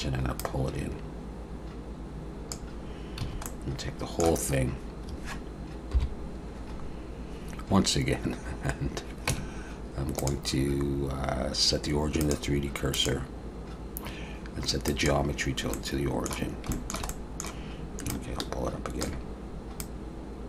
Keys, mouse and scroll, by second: 0.4 click, 3.2 a, 3.5 middle click, 5.9 KP_7, 6.8-7.8 scroll down 1, 9.0-9.3 scroll down 2, 9.3 Tab, 10.2 click, 12.9 click, 15.7 middle click, 16.7 shift+middle click, 17.1 middle click, 18.1 ctrl+click, 19.8 click.